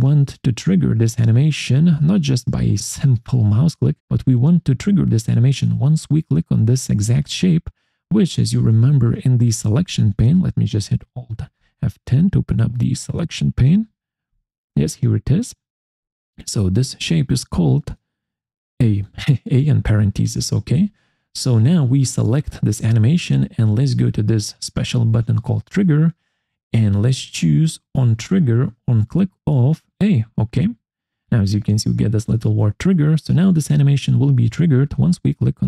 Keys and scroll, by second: 14.2 alt+F10.